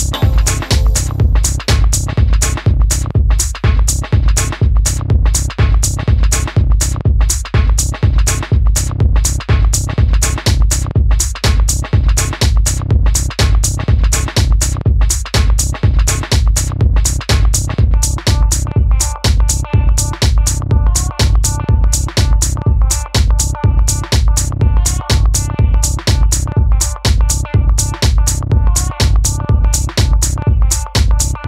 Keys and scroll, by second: 5.5 d.